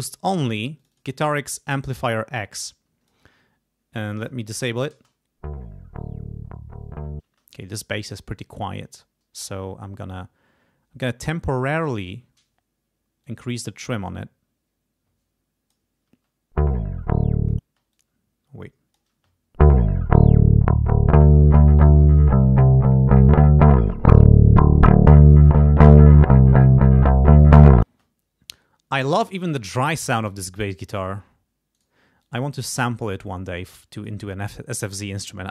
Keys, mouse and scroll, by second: 0.8 click, 2.3 click, 4.2 click, 4.9 space, 7.2 space, 13.2-15.9 drag, 16.1 space, 17.6 space, 17.9-19.2 drag, 19.1 space, 27.9 space, 30.2 click, 30.9 right click, 31.8 right click, 32.2-34.2 drag.